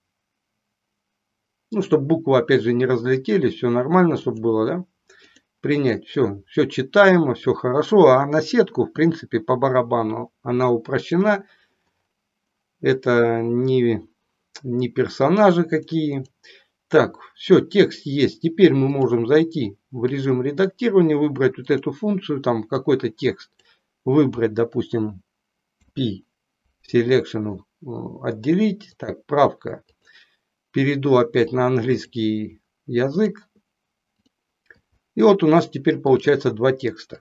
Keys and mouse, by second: 4.2-5.4 drag, 11.0 click, 15.8 click, 18.9-20.3 drag, 22.7-23.7 drag, 25.8 p, 29.0-30.4 drag, 31.7 click, 36.0-37.2 drag.